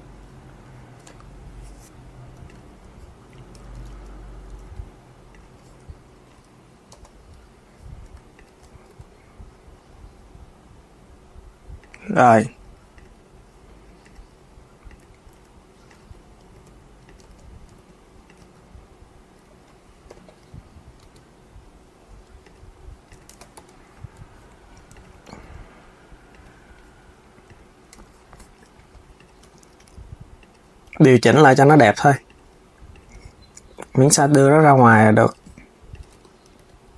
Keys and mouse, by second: 2.2 click, 3.3 KP_1, 4.4 g, 6.6 KP_1, 7.7 Tab, 8.1 click, 8.6 r, 12.7 click, 13.7 click, 14.6 click, 15.0 Tab, 15.6 click, 15.7-18.1 typing, 19.9 KP_7, 20.7 r, 22.2 Escape, 22.8 click, 23.0 z, 23.3 KP_3, 24.6 click, 25.1 g, 27.2 click, 28.9 click, 29.2 g, 30.8 click, 32.6 click, 32.8 KP_1, 33.8 click, 35.6 click, 35.9 KP_3, 36.3 g.